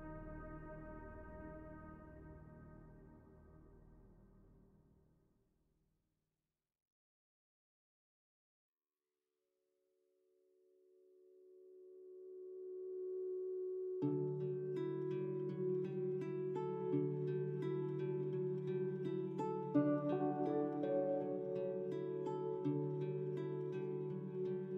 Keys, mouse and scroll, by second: 0.1-3.1 scroll down 1, 8.0 click, 12.9-15.9 drag.